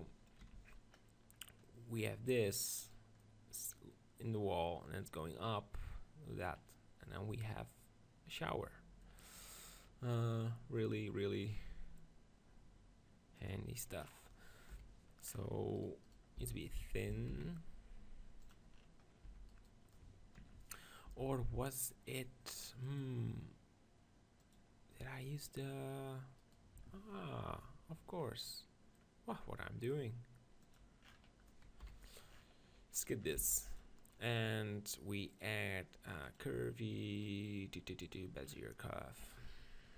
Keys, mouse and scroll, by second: 1.3-2.4 middle drag, 2.4-4.0 drag, 4.0 right click, 4.8-6.0 middle drag, 6.4-8.6 middle drag, 9.3-13.4 middle drag, 13.4-15.3 drag, 14.7 KP_1, 15.3 middle click, 15.8 click, 16.4 s, 17.1 s, 18.5-19.5 drag, 19.3 Tab, 19.5-22.2 middle drag, 21.2 Tab, 22.8-26.0 drag, 25.2-27.4 middle drag, 26.5-28.2 right drag, 30.6 right click, 31.8 KP_1, 32.9 click, 33.4 x, 34.9 middle click, 35.6-37.3 drag, 39.0 middle click.